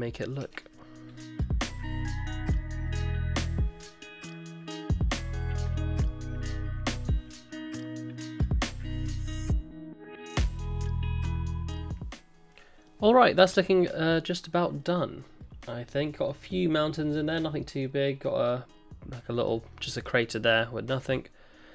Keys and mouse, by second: 0.4 Tab, 1.4 Tab, 1.6 Tab, 1.7 click, 1.8 ctrl+z, 1.9 Tab, 1.9 click, 2.0 Tab, 2.0 click, 2.3 1, 2.5 ctrl+z, 2.6 ctrl+z, 2.6 click, 2.7 alt+s, 3.0 click, 3.0 alt+s, 3.2 click, 3.3 alt+s, 3.5 click, 3.8 ctrl+KP_Add, 3.8 ctrl+z, 4.0 ctrl+z, 4.0 ctrl+KP_Add, 4.0 click, 4.2 click, 4.3 click, 4.4 click, 4.4 alt+s, 4.6 alt+s, 4.7 alt+s, 4.9 alt+s, 5.0 click, 5.1 3, 5.3 Tab, 5.5 click, 5.5 Tab, 5.6 click, 5.6 Tab, 6.1 alt+1, 6.2 alt+s, 6.5 click, 6.6 click, 6.7 alt+s, 6.8 click, 6.9 click, 6.9 alt+s, 7.2 click, 7.3 alt+s, 7.5 click, 7.8 alt+s, 7.8 middle click, 8.0 middle click, 8.3 ctrl+KP_Add, 8.4 click, 8.4 middle click, 8.4 Tab, 8.4 middle click, 8.5 Tab, 8.7 alt+s, 8.9 ctrl+KP_Add, 9.0 middle click, 9.0 Tab, 9.1 ctrl+z, 9.1 middle click, 9.1 ctrl+z, 9.2 middle click, 9.2 Tab, 9.2 middle click, 9.3 Tab, 9.4 ctrl+z, 9.4 middle click, 9.6 Tab, 9.6 alt+s, 9.8 middle click, 10.0 Tab, 10.0 alt+s, 10.4 ctrl+KP_Add, 10.5 Tab, 10.5 middle click, 10.5 middle click, 11.4 middle click, 12.8-16.2 middle drag, 16.5-16.9 middle drag, 17.1-17.6 middle drag, 19.4 middle drag, 20.0-20.6 middle drag, 21.0-21.6 middle drag.